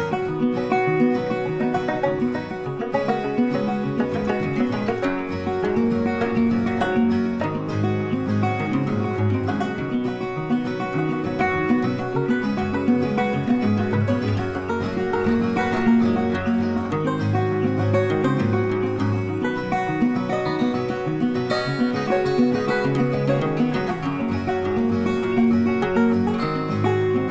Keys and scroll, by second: 0.7 space, 1.7 c, 2.1 z, 3.0 space, 13.0 z, 22.0 z, 24.9 space.